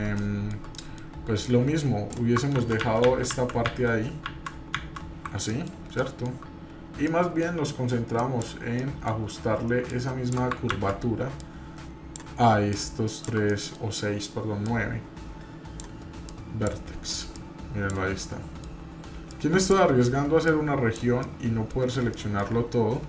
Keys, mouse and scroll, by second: 0.2 shift+middle click, 0.7-2.4 middle drag, 2.5-4.6 ctrl+z, 5.5 middle click, 5.6 scroll down 1, 6.0 shift+middle click, 7.0 middle click, 8.2 click, 8.8 middle click, 9.2-9.6 scroll up 2, 9.9 shift+click, 10.7 ctrl+z, 11.3 click, 12.7 shift+click, 13.5 middle click, 14.6-15.8 drag, 16.3 click, 17.3 click, 18.2 middle click, 19.3 click, 20.5 click, 21.2 middle click, 21.8 scroll down 1, 22.1 middle click.